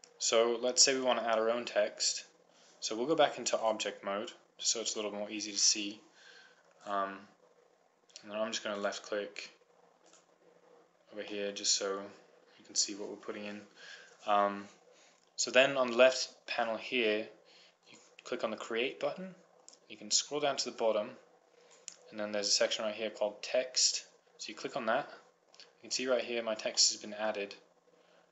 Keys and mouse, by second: 1.6 middle click, 1.8-2.9 middle drag, 3.7 click, 7.8-8.9 drag, 9.4-11.8 drag, 11.8-15.1 middle drag, 18.2-20.0 drag, 20.0 middle click, 20.1-21.8 drag, 24.9-26.7 drag, 26.7-27.8 middle drag, 28.1 middle click.